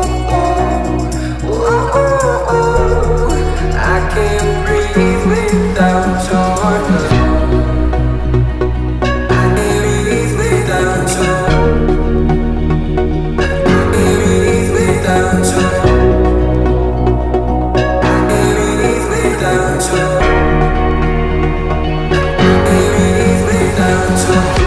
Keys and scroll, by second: 1.1 t, 4.8-5.8 typing, 7.2 m, 9.3-10.5 typing, 11.6 space, 13.2 p, 14.2-15.9 typing, 15.5 Return, 16.3 Escape.